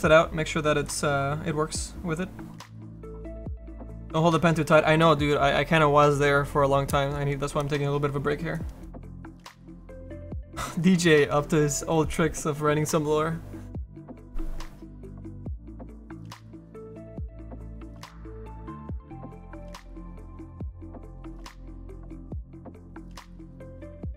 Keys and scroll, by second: 10.4 v.